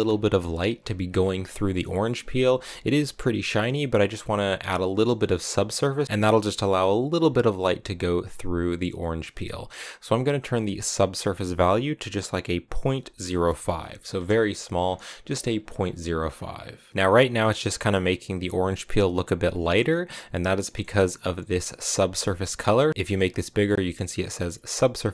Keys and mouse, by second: 1.8 middle click, 10.9-14.5 drag, 20.6 middle click, 22.6 middle click, 23.1 click, 23.6 click.